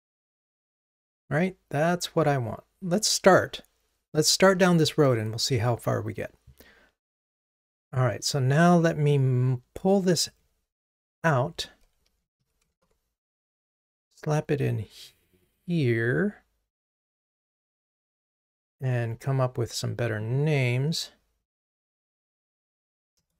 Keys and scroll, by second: 11.2 super+x, 12.8 ctrl+Tab, 17.2 super+v, 22.5 ctrl+t.